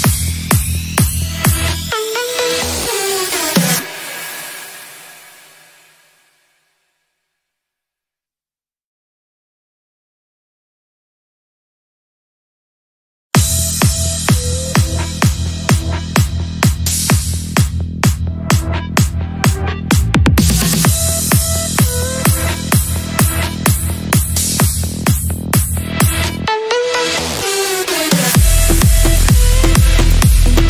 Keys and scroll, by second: 6.4 shift+Page_Up, 7.4 c, 8.2 shift+F2, 8.5 Escape, 9.4 F3, 14.4 shift+F2, 15.0 F3, 22.4 shift+F2, 23.0 Escape, 25.8 a, 27.6 shift+Home, 28.5 Caps_Lock, 29.0 a.